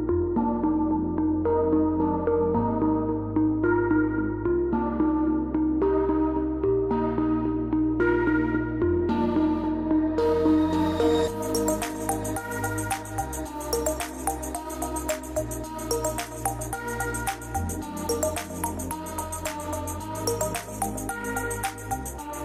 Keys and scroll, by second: 2.1 KP_0, 3.3 Return, 4.6 F12, 7.4 KP_6, 8.0 Return, 8.6 F12, 10.8 Return, 11.0 Return.